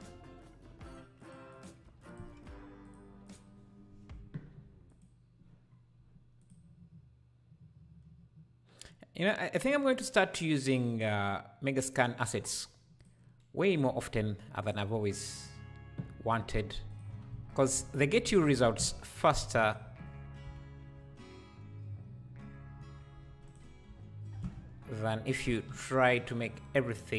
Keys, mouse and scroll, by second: 2.1-13.0 drag, 14.6 shift+right click, 15.4 click, 16.1 s, 18.1 g, 20.5 KP_Decimal, 21.3-22.3 scroll down 1, 22.3-22.7 scroll down 2, 23.3 alt+d.